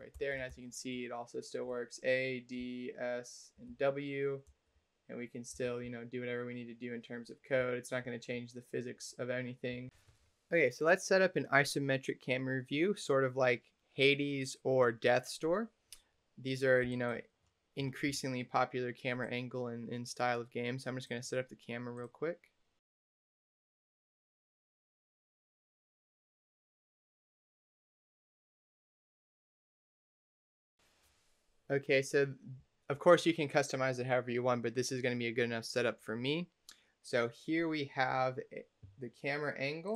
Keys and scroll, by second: 0.0-2.5 typing, 3.6 w, 4.4 space, 5.4 w, 5.7 d, 7.4 space, 9.6 a.